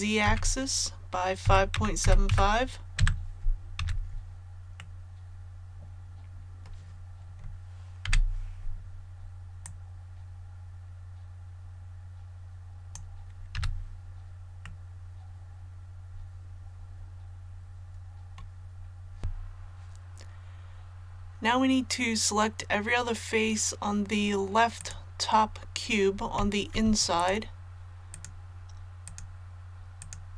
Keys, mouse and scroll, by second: 0.2 e, 1.4 KP_5, 1.7 KP_Decimal, 2.0 KP_7, 2.2 KP_5, 3.8 a, 4.8-7.5 middle drag, 9.6-13.5 drag, 14.6-18.5 middle drag, 18.7 scroll down 1, 19.2 a, 24.8 right click, 27.1 shift+right click, 29.0 shift+right click, 29.9 shift+right click.